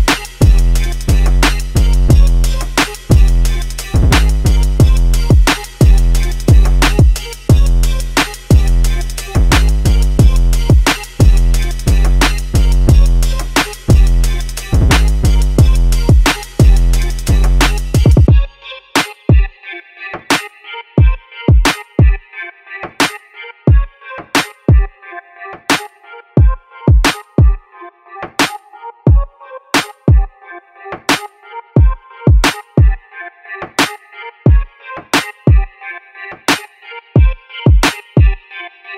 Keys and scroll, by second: 0.4-1.4 typing, 3.0-7.1 typing, 33.2-34.1 typing, 35.3 Return, 36.8-37.5 typing.